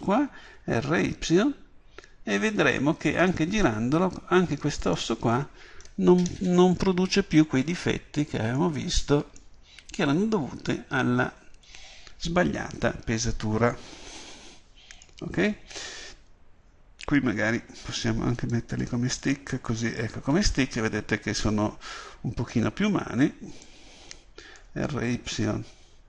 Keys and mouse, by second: 0.6 r, 5.0-14.3 drag, 18.5-23.6 drag, 23.6 right click.